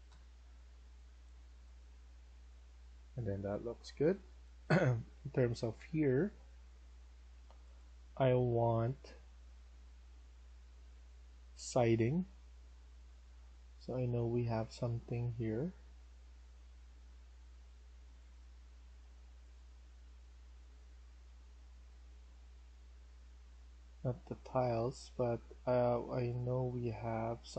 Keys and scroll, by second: 0.0-1.8 typing, 3.1-4.2 typing.